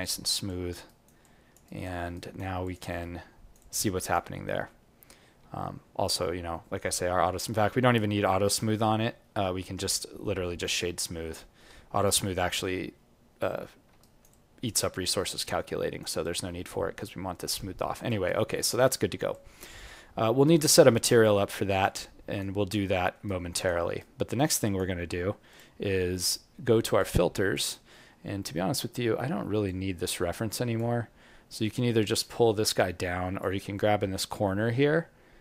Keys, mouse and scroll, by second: 0.4 alt+click, 0.8 alt+right click, 1.2 alt+click, 1.6 alt+right click, 2.1 right click, 2.6 click, 3.0 alt+right click, 3.6 alt+click, 5.4 w, 13.9 alt+right click, 14.3 alt+click, 14.9 alt+middle click, 15.4 alt+right click, 16.2 alt+click, 18.2 alt+right click, 19.8 alt+click, 19.8 alt+middle click, 20.4 alt+right click, 21.2 alt+click, 21.9 alt+right click, 22.8 alt+middle click, 23.2 alt+right click, 24.6 alt+click, 25.5 click, 26.9 click.